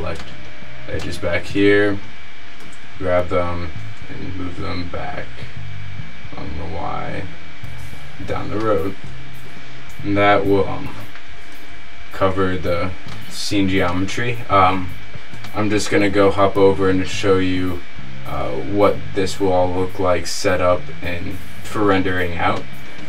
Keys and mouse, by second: 2.7 g, 10.8-13.2 middle drag, 15.0-17.3 right drag, 17.3 middle click, 22.7-23.0 middle drag.